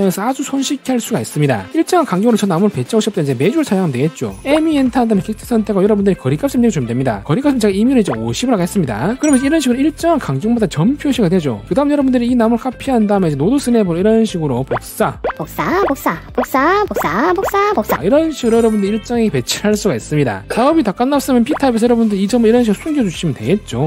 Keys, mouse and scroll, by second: 4.7 e, 6.1 click, 8.4 5, 11.7 c, 11.9 c, 12.0 right click, 12.2 click, 12.4 click, 12.6 right click, 13.4 click, 13.8 shift+right click, 14.3 d, 14.8 click, 15.2 shift+right click, 15.5 click, 15.6 shift+right click, 16.0 click, 16.1 shift+right click, 16.3 d, 16.4 click, 16.8 shift+right click, 17.0 click, 17.2 shift+right click, 17.5 click, 17.7 shift+right click, 17.9 click, 18.1 right click, 22.7 click, 23.5 click.